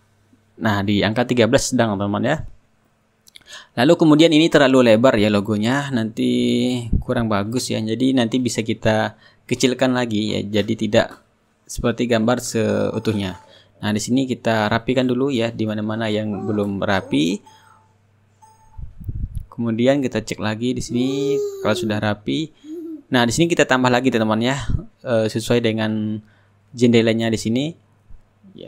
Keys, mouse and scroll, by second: 0.1 KP_3, 0.5 Return, 1.7 scroll up 1, 1.9-3.2 middle drag, 3.2-6.1 drag, 7.7-10.0 middle drag, 10.1 click, 12.7 click, 13.3 click, 15.2-20.4 drag, 22.1 click, 23.9 click, 25.2 click, 25.7-27.7 middle drag, 28.2 click.